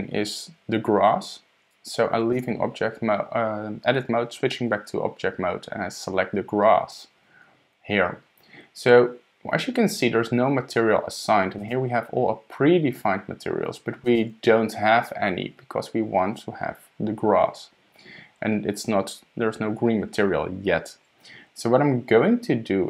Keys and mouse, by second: 2.3 Tab, 6.9 click, 11.6-14.2 drag.